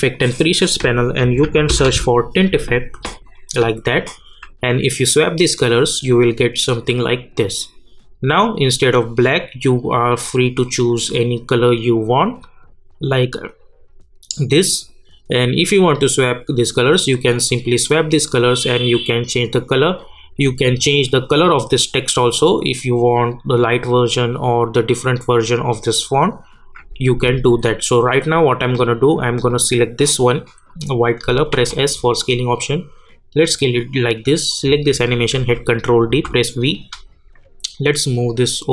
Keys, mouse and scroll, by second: 1.0-2.3 typing, 3.1 click, 7.4-30.7 drag, 31.5 s, 32.2-34.5 drag, 35.3 ctrl+d, 36.1 v, 36.7-38.7 drag.